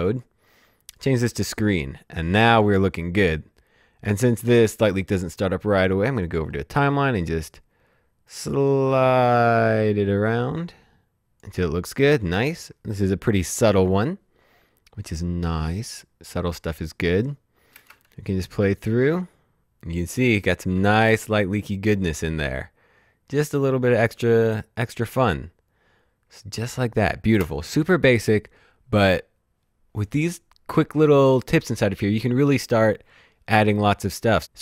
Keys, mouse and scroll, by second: 0.1 click, 6.3 click, 8.1 click, 11.8-12.3 scroll down 1, 12.6 shift+scroll down 1, 13.9 scroll down 1, 16.7 click, 27.3 space.